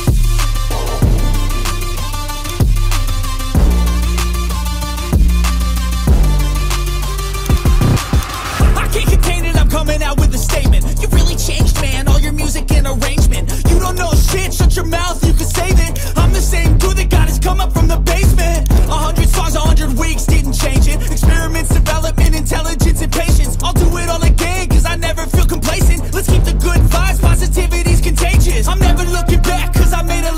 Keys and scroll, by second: 23.4 0.